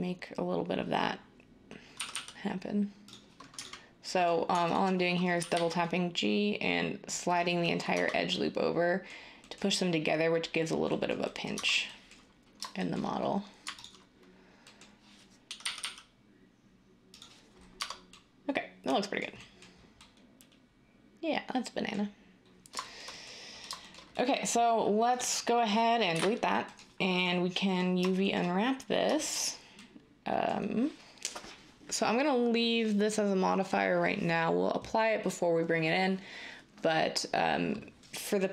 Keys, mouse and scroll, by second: 2.0 g, 2.1 g, 4.3 g, 5.3 g, 5.5 g, 7.9 Tab, 11.5 Tab, 15.6 g, 15.8 g, 17.7 Tab, 26.1 Delete, 26.2 End.